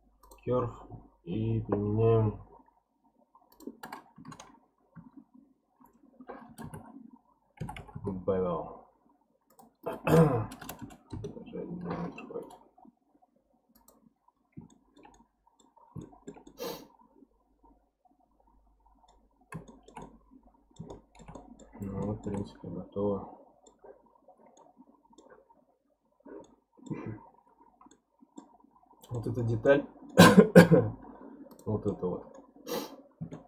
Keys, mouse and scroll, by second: 1.0-3.5 scroll down 1, 3.5-6.6 drag, 7.8 m, 9.5-10.6 drag, 10.6 BackSpace, 12.4-14.3 right drag, 14.3-14.7 scroll up 1, 14.7-15.8 shift+middle drag, 15.8 scroll down 3, 16.0-19.2 shift+middle drag, 19.2-19.7 scroll up 2, 19.7-21.7 shift+middle drag, 21.7 scroll down 1, 22.0-28.6 shift+middle drag, 28.6-29.0 scroll down 10, 29.1-31.5 middle drag, 31.5 click, 31.9-32.7 middle drag, 32.7 scroll up 2, 33.3-33.4 shift+middle drag.